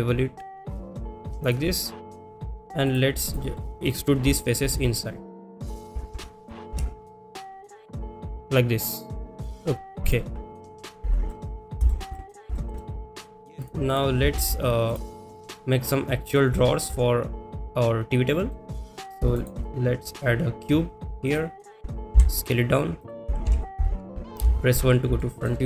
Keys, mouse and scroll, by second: 2.1 click, 2.6 click, 2.8 click, 3.5 middle click, 4.2 KP_7, 4.8 shift+middle click, 5.7 click, 8.1 e, 10.0 click, 10.9 click, 11.4 middle click, 11.9 shift+middle click, 12.2 middle click, 12.5 shift+middle click, 12.8 middle click, 13.4 click, 13.8 click, 15.6 ctrl+s, 15.6-16.3 middle drag, 16.6 shift+middle drag, 18.3 middle drag, 18.8 shift+middle click, 20.2-21.4 drag, 22.7 s, 23.4 KP_3, 25.2 shift+middle click, 25.2 KP_1.